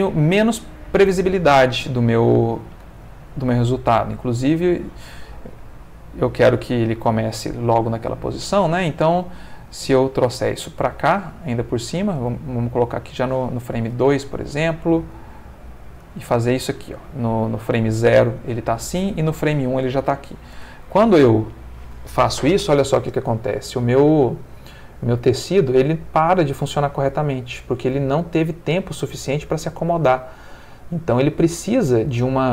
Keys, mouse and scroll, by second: 2.4 Escape, 5.6-7.3 drag, 10.6 g, 12.1 space, 12.8 click, 14.6 a, 15.0 g, 16.0 space, 16.7-17.8 drag, 19.2-20.4 drag, 20.6 space.